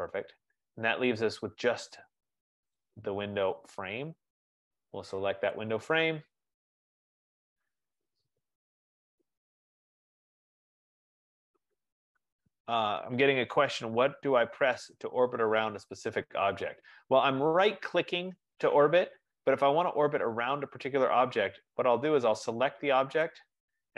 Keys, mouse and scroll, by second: 5.7 click, 9.0 right click, 13.5 right click, 20.0 right click, 20.2 F15, 21.5 click, 23.3 click.